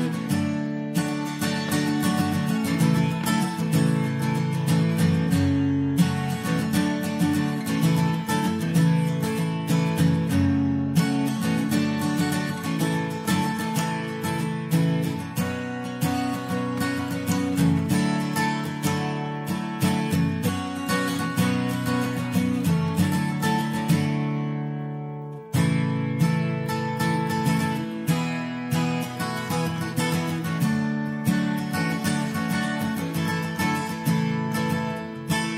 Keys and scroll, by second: 10.0 Return, 11.2 Return, 11.9 Return.